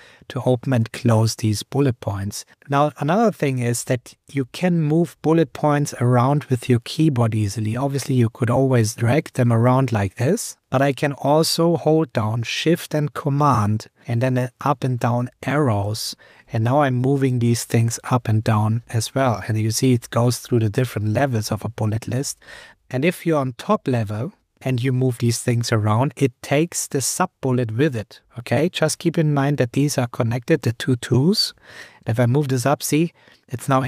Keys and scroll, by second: 3.6 Up, 5.1 Down, 15.8 shift+super+Up, 17.4 shift+super+Down, 19.6 shift+super+Down, 20.9 shift+super+Down, 21.9 shift+super+Down, 22.2 shift+super+Up, 22.8 Up, 24.3 Up, 26.8 Down, 27.5 Up, 29.2 Up, 29.4 Down, 29.8 Up, 30.3 Down, 30.7 Up, 32.0 shift+super+Up.